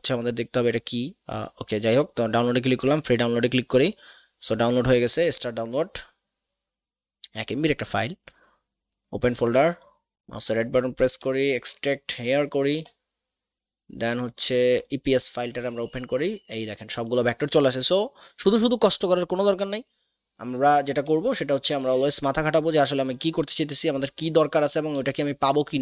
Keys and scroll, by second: 25.1 space.